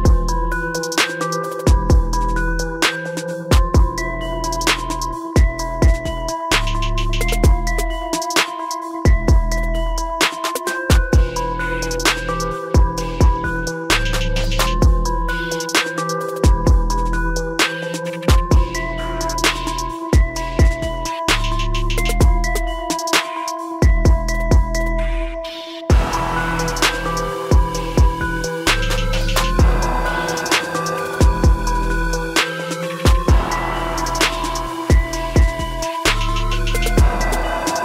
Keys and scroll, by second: 3.1 ctrl+t.